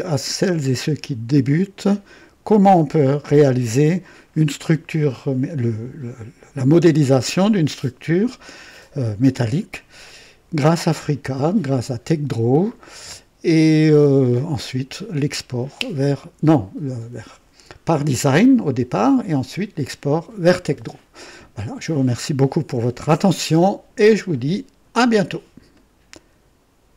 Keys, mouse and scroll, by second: 25.7 right click, 26.9 click.